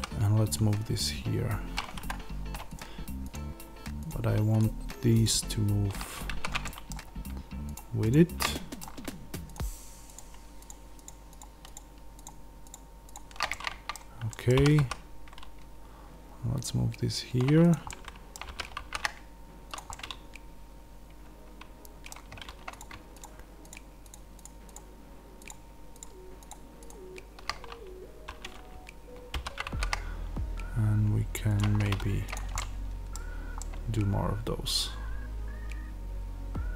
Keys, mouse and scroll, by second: 2.0 Escape, 2.7 shift+click, 6.2 ctrl+z, 6.5-7.6 middle drag, 7.6 shift+click, 8.3-9.4 middle drag, 9.4 shift+click, 13.4-17.6 middle drag, 14.5 g, 17.6 click, 17.8-19.6 middle drag, 18.4 g, 19.6 click, 19.8-22.7 middle drag, 22.7 click, 23.1 shift+click, 29.2 alt+d, 31.5 click, 32.5-36.7 middle drag, 33.1-33.5 scroll down 2.